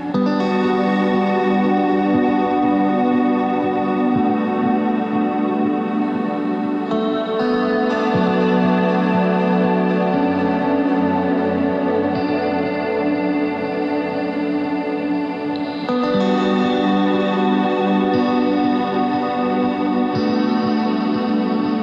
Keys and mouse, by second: 0.2 z, 0.7 click, 1.8 Tab, 5.0 middle click, 5.6 s, 8.4-9.6 drag, 12.2 middle click, 13.9 KP_1, 15.1 r, 17.5 s, 21.4 middle click.